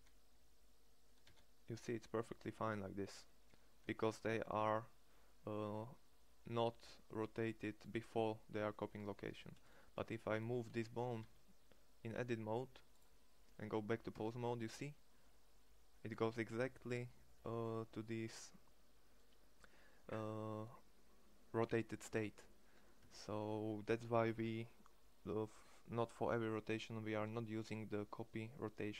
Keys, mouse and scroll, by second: 0.8 r, 8.8 r, 9.5 Tab, 10.7 r, 13.7 Tab, 22.6 Tab.